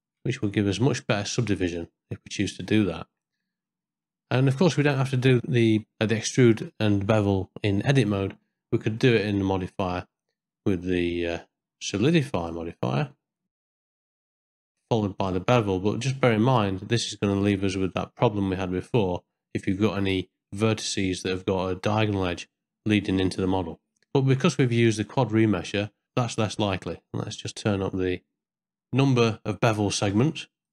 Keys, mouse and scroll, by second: 0.0 shift+middle click, 0.4 middle click, 3.1 Tab, 3.7 middle click, 4.7 Tab, 5.8 middle click, 9.6-12.5 drag, 14.2 click, 15.3-17.0 drag, 18.5 middle click, 19.7 shift+middle click, 20.3 middle click, 20.9 ctrl+middle click, 22.5-23.5 middle drag, 23.8 ctrl+middle click, 24.1 shift+middle click, 24.8 middle click, 26.0 middle click, 26.5 shift+middle click, 27.5 middle click, 28.5-29.6 drag, 30.1 middle click.